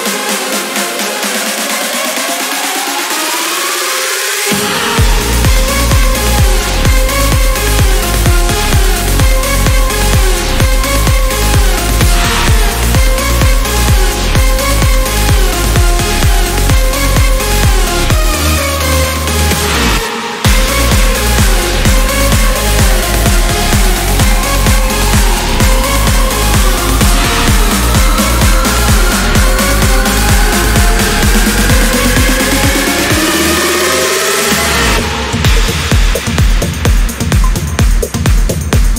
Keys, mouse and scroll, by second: 0.3 click, 1.3 click, 2.1 ctrl+click, 3.0 ctrl+click, 4.1 ctrl+click, 5.2 ctrl+click, 6.1 click, 7.9 click, 8.4 space, 9.5 click, 10.9 click, 12.5 click, 13.6 click, 14.7 space, 15.3 click, 16.5 click, 17.1 click, 17.9 ctrl+click, 19.1 ctrl+click, 20.1 ctrl+click, 22.2 ctrl+click, 24.4-26.6 drag, 27.6 click, 28.9 click, 29.7 click, 30.2 space, 31.4 click, 31.9 space, 32.6 click, 33.5 click, 34.1 right click, 34.8 click, 36.0-38.3 drag, 38.5 click.